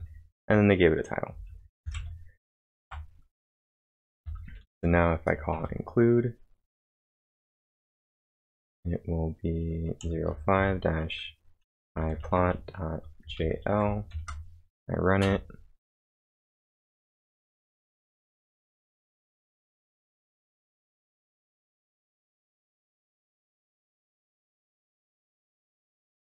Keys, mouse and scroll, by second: 1.8-5.5 typing, 8.3 shift+", 10.0 0, 11.4-14.6 typing, 15.2 Return.